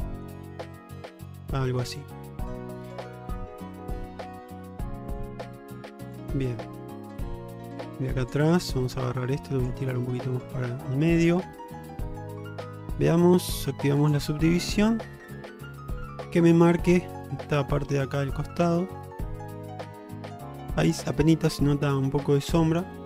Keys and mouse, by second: 0.8-1.9 middle drag, 2.6 click, 3.9 g, 5.2 click, 5.6 g, 6.8-8.0 middle drag, 8.8 click, 10.2-12.9 middle drag, 14.1 click, 14.8 Tab, 15.6-16.3 middle drag, 17.2-20.7 middle drag, 21.0 middle drag.